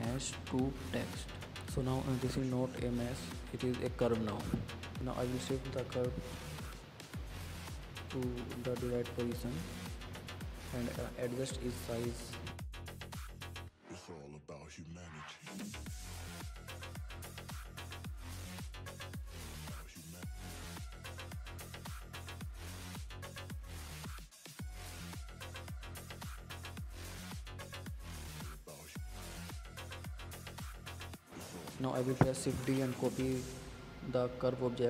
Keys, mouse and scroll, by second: 0.2 click, 0.7-1.5 middle drag, 1.5 KP_Decimal, 2.6 KP_1, 2.9-3.3 scroll down 11, 3.4-3.9 scroll up 2, 3.9 shift+middle click, 4.5 click, 5.1 click, 6.0-6.6 scroll up 6, 6.6-7.2 shift+middle drag, 7.2 click, 7.8 click, 8.5 ctrl+z, 9.1 click, 9.5-10.4 drag, 10.4 scroll up 4, 10.6 shift+middle click, 11.4-12.1 drag, 12.6 click, 14.1 s, 16.1-17.5 drag, 17.5 s, 19.4 click, 19.9 scroll down 7, 20.2 scroll up 4, 20.5 shift+middle click, 21.2-22.4 drag, 22.4-22.8 scroll up 7, 22.8-23.6 shift+middle drag, 23.6-25.1 drag, 26.6-27.2 scroll down 3, 27.2 click, 28.2 Tab, 28.4 click, 28.7 click, 29.4 g, 30.2 Tab, 30.8 click, 32.4 alt+d.